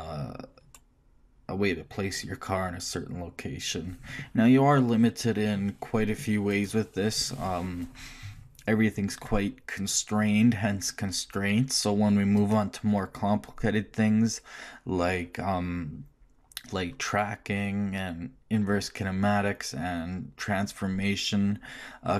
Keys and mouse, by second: 0.3-12.6 middle drag.